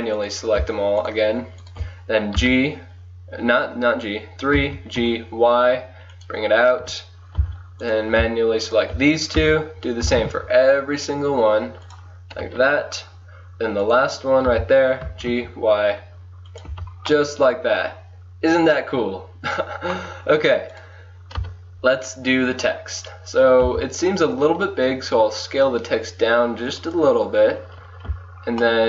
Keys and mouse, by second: 2.4 KP_3, 2.8 right click, 3.6-4.7 middle drag, 4.6 g, 6.8 KP_1, 7.4 a, 7.9-11.1 drag, 9.4 KP_3, 10.1 g, 12.4 KP_1, 13.9-15.1 drag, 14.5 KP_3, 15.1 g, 16.7 Tab, 17.4 click, 20.1-22.6 drag, 21.4 KP_1, 23.7 s.